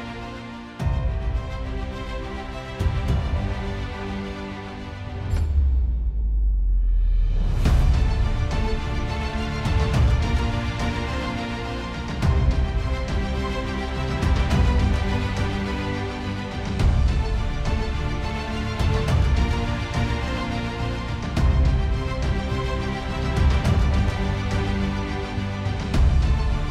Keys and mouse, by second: 2.1 alt+middle click, 3.4 middle click, 3.8 alt+middle click, 5.7 middle click, 12.0 alt+middle click, 13.4 middle click, 24.3 alt+middle click.